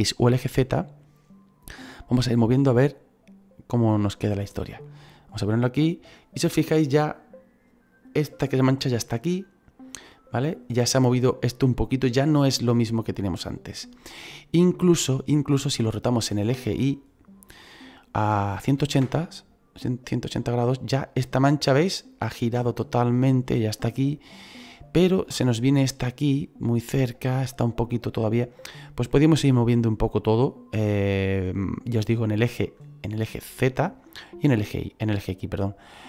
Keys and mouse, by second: 2.5 click, 16.7 click, 18.5 KP_1, 18.6 KP_8, 18.7 KP_0, 18.9 Return, 18.9 KP_Enter.